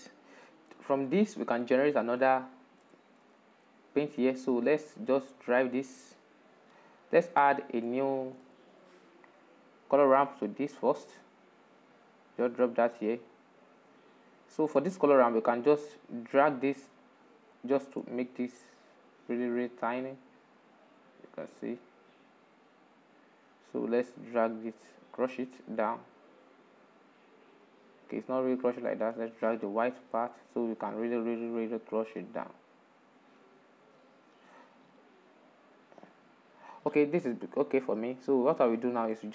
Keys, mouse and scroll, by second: 2.0-11.1 shift+middle drag, 13.0-29.8 drag, 29.8 scroll up 7, 30.9-36.8 drag, 36.8 shift+middle click, 37.8-38.2 scroll down 6.